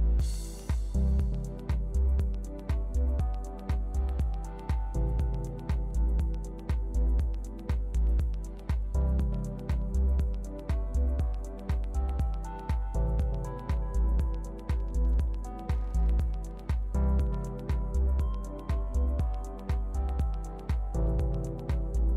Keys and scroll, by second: 10.6 super+d.